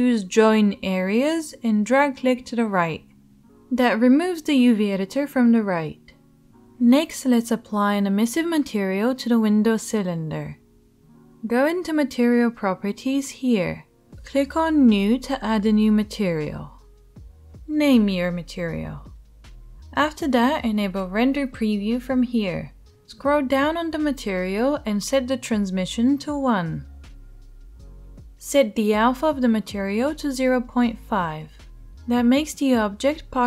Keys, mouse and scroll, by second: 16.4 click, 16.5-22.1 middle drag, 22.1-23.5 right drag, 23.5-33.4 middle drag.